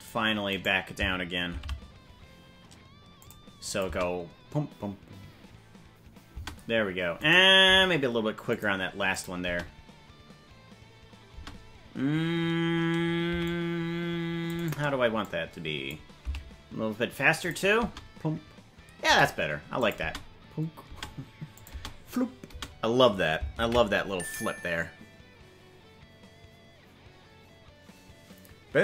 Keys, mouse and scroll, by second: 0.5 right click, 1.5 shift+d, 3.7-5.3 drag, 3.8 space, 6.4 space, 7.2 right click, 7.6 g, 9.1 click, 9.4 space, 11.3 space, 13.2 c, 15.2 click, 16.2 s, 17.8 space, 19.1 space, 19.8 click, 20.1 space, 20.9 space, 21.5-22.6 drag, 21.7 space, 22.5 space, 25.5 ctrl+s.